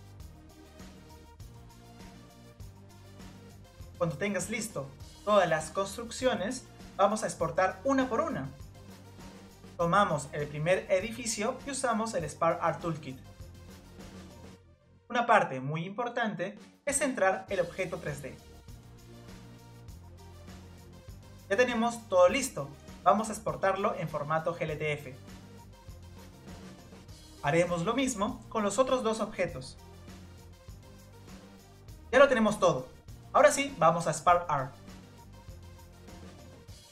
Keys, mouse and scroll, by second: 0.2 click, 0.5 click, 0.9 click, 1.5 click, 1.6 middle click, 1.8 middle click, 3.8-5.9 shift+middle drag, 5.9 scroll up 1, 6.0-7.7 shift+middle drag, 7.7-8.6 scroll up 1, 8.6 click, 9.5 Tab, 11.1 click, 19.9 click, 20.2 scroll down 2, 20.9 scroll up 1, 21.6-22.6 shift+middle drag, 22.6 scroll up 1, 23.4-25.1 shift+middle drag, 25.1-26.1 scroll up 1, 26.1-26.4 scroll up 1, 26.4-27.5 drag, 27.5 scroll down 2, 27.7-28.3 middle drag, 28.3 scroll down 2, 28.6 click, 29.3 click, 29.4 scroll up 1, 29.6-30.1 middle drag, 30.1 click, 30.3 g, 31.0-32.5 drag, 32.9 g, 33.2 middle drag, 34.1 click, 34.2-35.2 scroll up 2, 34.3 middle drag, 35.2 scroll up 1, 35.2-36.3 drag.